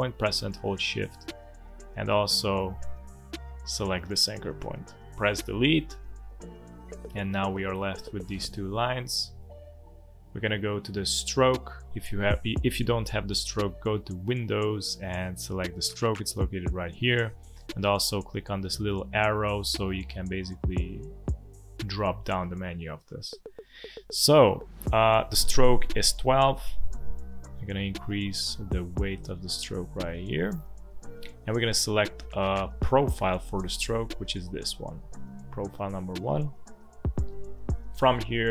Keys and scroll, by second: 5.3 Delete, 6.7 v, 7.8 space, 16.9 Escape.